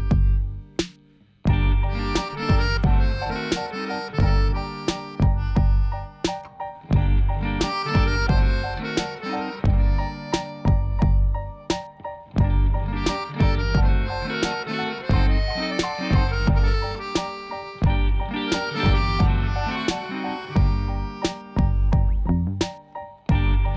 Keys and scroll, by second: 21.2 shift+a, 22.7 Tab, 23.1 s.